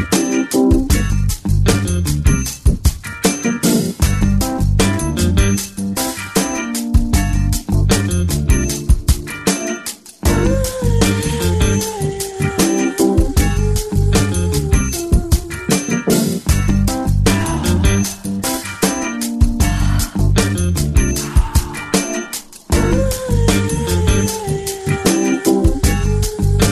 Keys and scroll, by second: 6.6 b, 7.8 ], 8.3 ], 11.4 x, 19.3 [, 19.8 [, 20.3 [, 21.7 x, 24.4 [, 24.9 [, 26.6-26.7 typing.